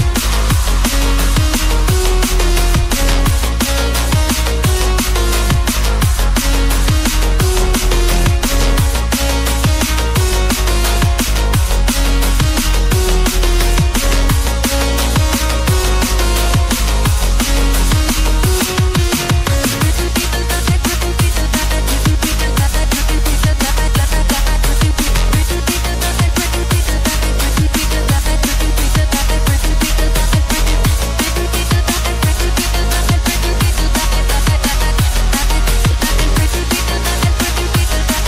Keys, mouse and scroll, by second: 0.0 click, 2.1 double click, 3.8 click, 6.2 double click, 7.4 click, 7.5 double click, 8.2 click, 8.3 double click, 18.6 click, 18.7 double click, 20.7 click, 20.8 double click, 24.7 click, 25.5-26.3 scroll up 1, 26.3 click, 31.4 scroll down 1, 31.5 scroll up 1, 36.9 scroll up 1, 37.3 scroll down 1, 38.1 click.